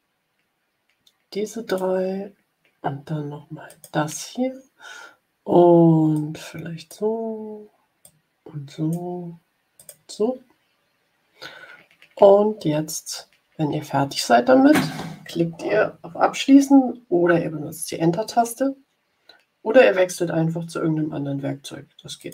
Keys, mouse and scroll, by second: 3.6 click, 6.0 click, 7.9-9.0 drag, 9.7 click, 22.1 click.